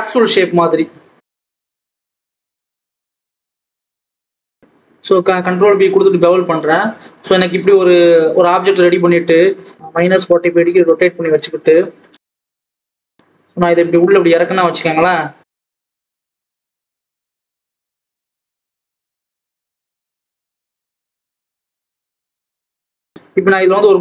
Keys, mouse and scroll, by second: 0.8 click, 1.5 a, 1.7 s, 2.5 alt+a, 2.6 click, 3.1 shift+click, 4.5 ctrl+b, 6.9 Tab, 7.9 KP_7, 10.1-11.1 drag, 11.8 click, 12.4 scroll up 1, 13.0 click, 13.5 scroll down 2, 13.7 KP_1, 14.1 scroll up 1, 14.4 click, 15.2 click, 17.1 click, 18.0 click, 19.3 click, 20.4 click, 21.2 click, 22.6 click, 23.1 click.